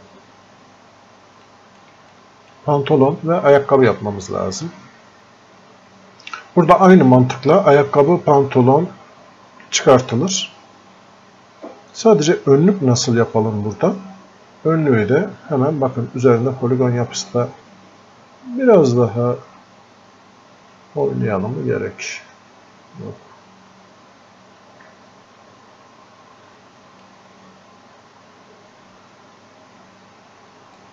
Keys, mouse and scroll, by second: 1.8 click, 2.5 alt+click, 21.1-30.8 drag, 30.8 click.